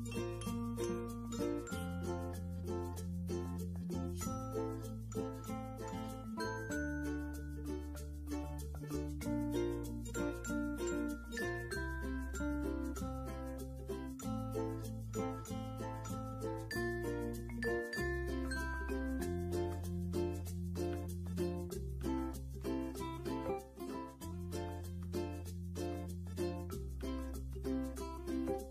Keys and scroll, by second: 14.6 ctrl+z, 16.9 ctrl+g.